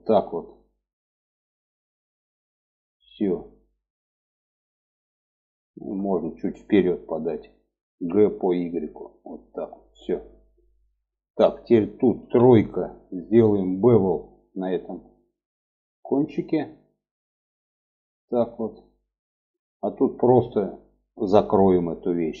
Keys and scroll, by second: 7.3 g, 11.5 3.